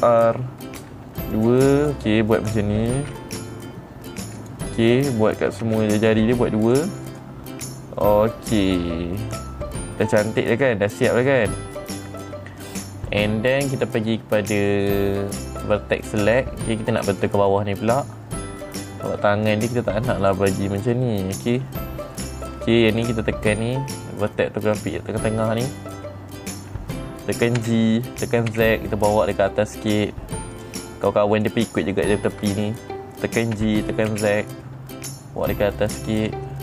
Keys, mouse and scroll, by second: 0.5 ctrl+r, 1.2 middle click, 1.8 click, 2.2 right click, 3.5 ctrl+r, 3.8 middle click, 4.6 click, 4.9 right click, 6.6 middle click, 7.1 click, 7.6 right click, 8.3-10.1 middle drag, 11.2 middle click, 12.7 middle click, 15.9 click, 16.8 middle click, 17.5 middle click, 17.5-18.0 scroll up 2, 18.0-19.8 middle drag, 20.7 click, 21.1-22.9 middle drag, 24.0 click, 24.8 middle click, 26.4 middle click, 28.1 g, 31.0 click, 31.8 click, 34.1 g.